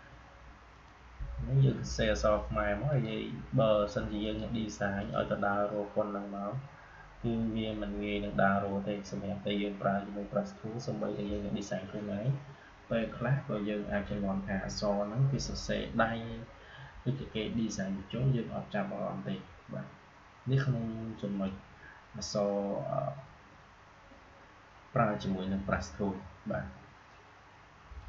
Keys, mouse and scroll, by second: 27.9 click.